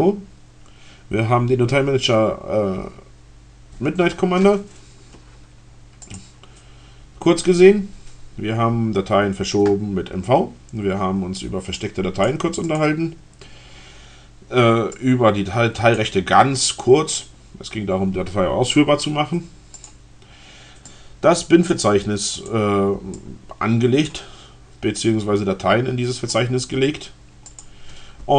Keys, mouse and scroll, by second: 5.8 click, 7.5-8.1 scroll down 2, 11.8 click, 12.7 click, 14.8-15.9 drag, 19.6 click, 20.8 click, 22.0 click, 23.2 click, 27.4 click, 28.0-28.3 drag.